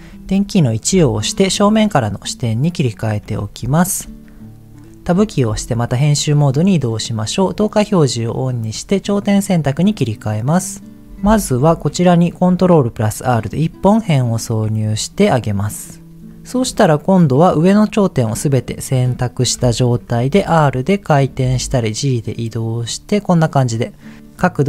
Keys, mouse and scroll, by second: 1.0 KP_1, 2.0-2.4 scroll down 1, 2.8 shift+middle click, 3.3-3.8 scroll up 1, 5.1 Tab, 7.3 click, 8.5 click, 11.6 ctrl+r, 13.4-14.5 right drag, 16.2 click, 18.3 middle click, 19.5 KP_1, 20.3 r, 21.1 click, 21.4 g, 22.7 click.